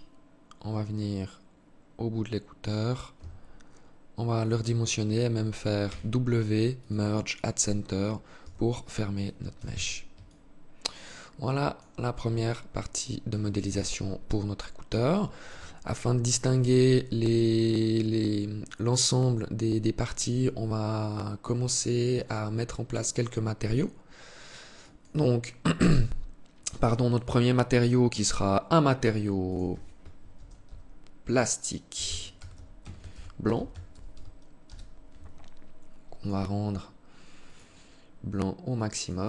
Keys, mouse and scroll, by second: 2.5 s, 5.2 w, 7.7 Tab, 8.9 z, 9.5 alt+click, 11.7 scroll down 5, 13.0 KP_3, 14.4 alt+shift+click, 15.1 scroll up 2, 15.3 scroll down 1, 21.4 click, 22.9 click, 28.7 click, 35.4 click, 36.7 click.